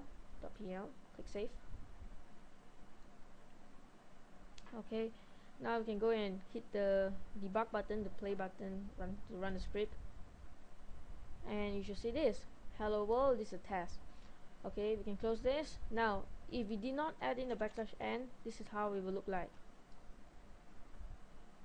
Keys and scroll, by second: 19.4 ctrl+s.